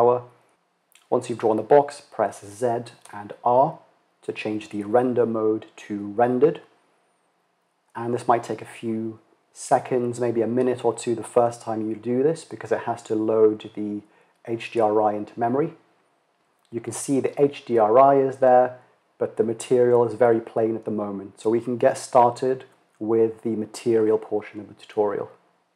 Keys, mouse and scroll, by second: 1.8 z.